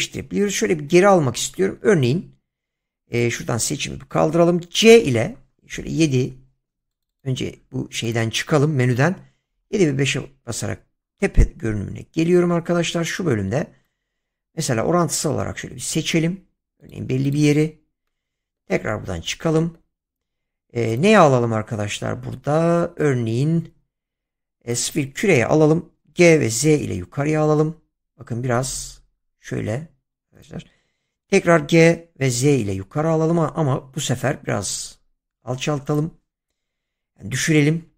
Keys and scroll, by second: 0.5 ctrl+z, 2.1 a, 4.8 c, 5.7 7, 6.2 5, 9.1-10.1 typing, 12.6 c, 25.8-27.1 typing, 31.5 g, 32.3 z, 37.8 g.